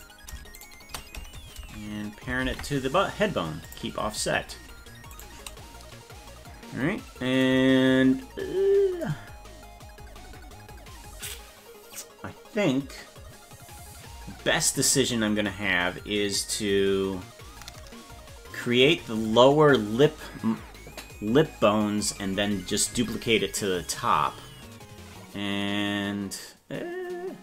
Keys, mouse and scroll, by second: 0.6 shift+right click, 2.4 ctrl+p, 5.1 right click, 15.7-16.0 scroll up 2, 16.3-16.6 scroll down 2.